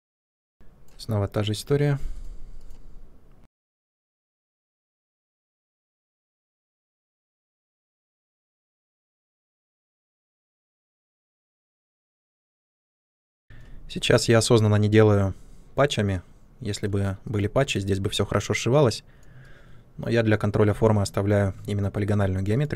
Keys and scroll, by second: 0.3 space, 0.9 Delete, 7.5 space, 13.1 space, 13.3 f.